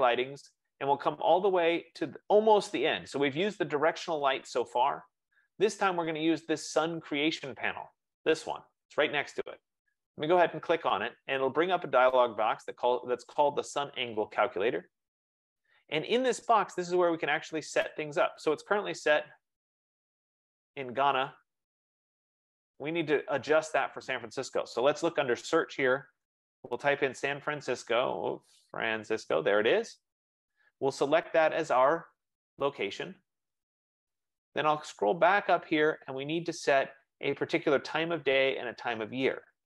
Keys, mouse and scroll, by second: 9.2 F15, 10.9-16.0 drag, 19.8-26.1 drag, 25.8-29.2 typing, 30.0 click, 30.8 click, 37.7 click.